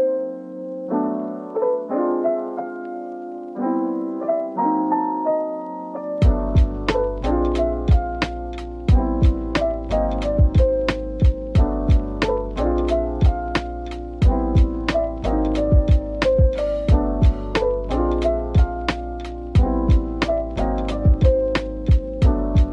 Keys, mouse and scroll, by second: 0.2-0.7 typing, 2.7 double click, 3.0 middle click, 6.4 shift+click, 7.9-8.9 typing, 11.5 double click, 11.8 middle click, 13.7-16.0 typing, 18.6 typing, 21.8 double click, 22.1 middle click.